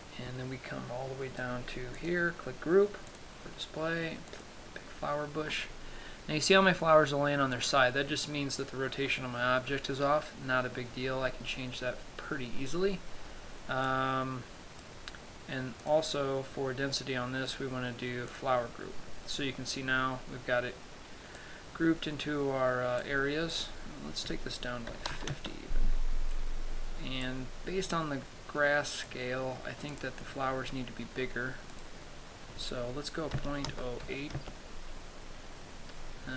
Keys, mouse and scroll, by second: 2.5 click, 3.6 click, 14.5 click, 16.4 click, 22.0 click, 24.1 click, 27.9 click, 30.4 click, 32.4 click.